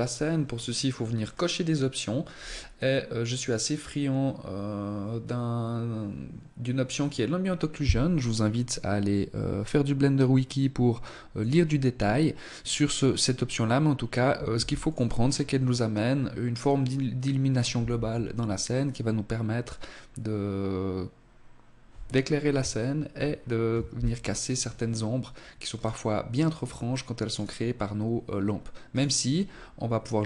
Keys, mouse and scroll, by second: 0.2-1.3 scroll down 1, 1.3-2.1 scroll down 2, 2.1 scroll up 2, 2.4 click, 7.2 click, 13.4 ctrl+s, 23.0-23.6 scroll down 1, 23.6-24.8 scroll down 2, 24.8 right click, 25.6 right click, 26.3 right click, 27.9 right click, 28.4 scroll up 2, 29.7 ctrl+s.